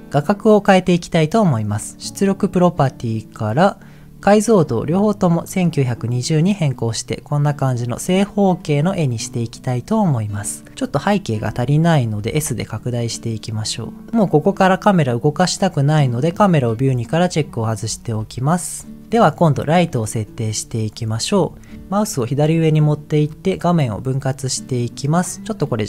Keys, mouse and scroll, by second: 2.3 click, 3.3 click, 5.0 click, 10.8 click, 12.2 s, 17.3 click, 18.5-18.8 scroll down 2, 23.3-25.0 drag.